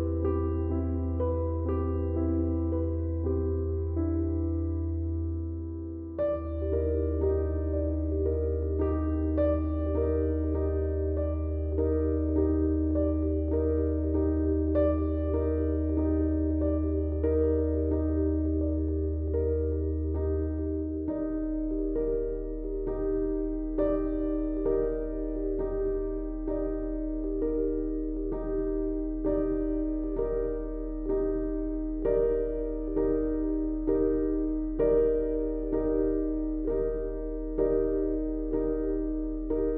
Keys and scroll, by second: 1.3 Delete, 7.3 ctrl+d, 7.4 Escape, 10.4 F1, 19.9 F1, 26.9 ctrl+z.